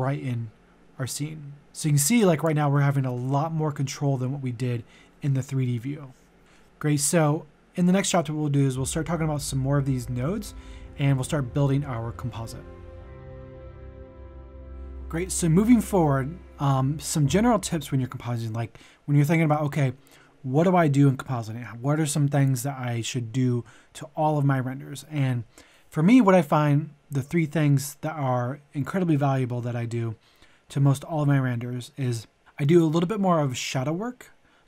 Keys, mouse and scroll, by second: 15.1-34.6 drag.